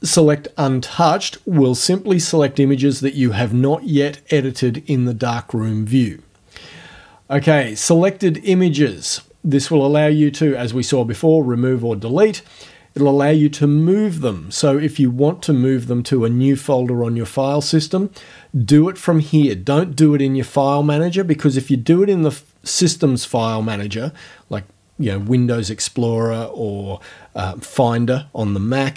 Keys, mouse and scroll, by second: 0.2 click, 7.6 click.